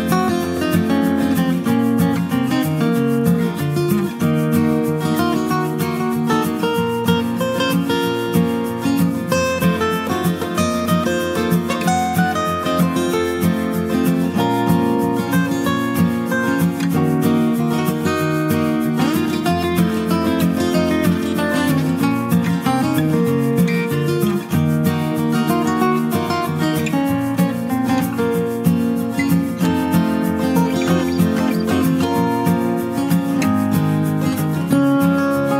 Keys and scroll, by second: 4.5-5.2 scroll, 7.5-7.9 scroll.